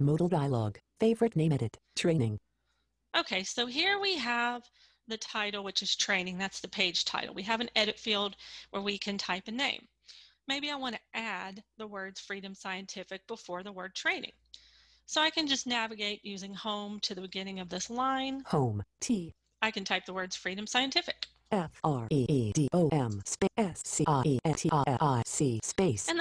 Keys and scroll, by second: 16.3 Home.